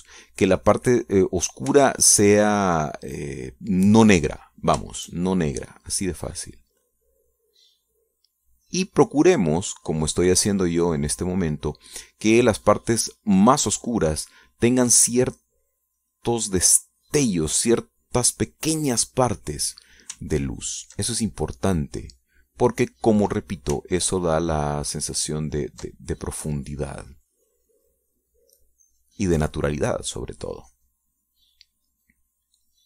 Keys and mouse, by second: 0.9 middle click, 1.6 middle click, 1.8 click, 2.7 shift+click, 3.3-9.1 shift+drag, 9.2-12.7 drag, 13.1-15.9 drag, 16.0 middle click, 16.7-18.4 drag, 18.5 click, 18.9 middle click, 19.7 click, 21.7 ctrl+click, 22.4-23.9 ctrl+drag, 25.2-27.1 ctrl+drag, 27.6-32.8 drag.